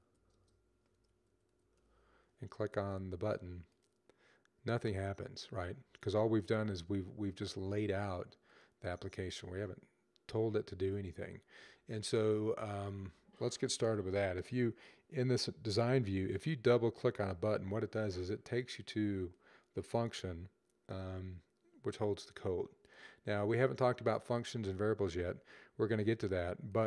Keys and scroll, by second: 0.0-1.5 typing.